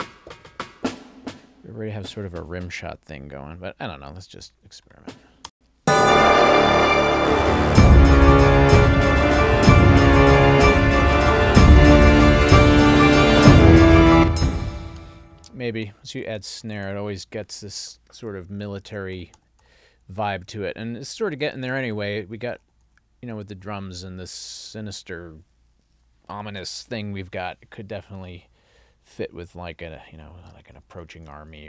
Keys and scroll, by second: 5.5 space, 14.1 space, 15.0 Up, 18.3 Up, 22.4 Up, 30.0 Down.